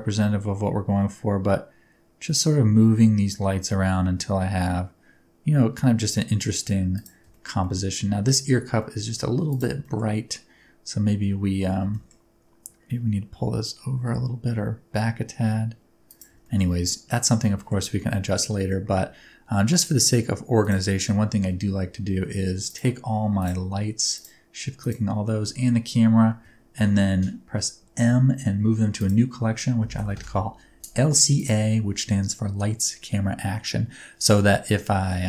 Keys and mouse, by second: 6.9 click, 7.3 shift+middle click, 7.6 middle click, 8.8 middle click, 9.5 click, 9.8 middle click, 11.7 g, 11.9 middle click, 16.0 click, 16.8-17.2 middle drag, 17.5 shift+middle click, 18.0-18.3 middle drag, 20.5 click, 22.6 shift+click, 23.3 shift+click, 24.1 shift+click, 27.9 m.